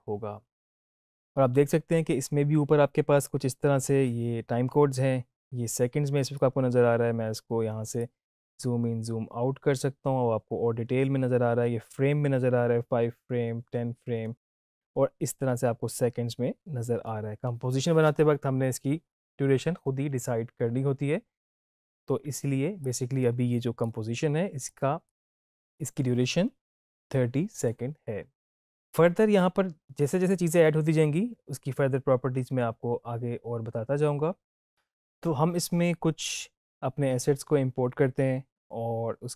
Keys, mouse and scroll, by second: 5.7-6.3 drag, 22.8-24.0 drag.